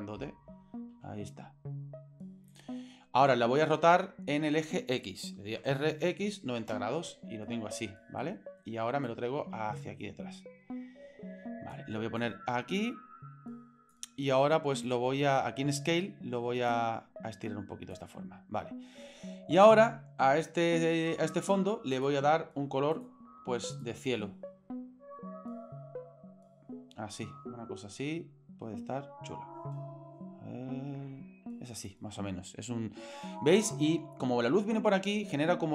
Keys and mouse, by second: 0.9 s, 1.6 middle click, 5.6 r, 8.2 middle click, 9.1-11.7 drag, 12.2-14.0 drag, 14.8 click, 16.7-17.9 drag, 17.8 middle click, 22.0 click, 22.9 click.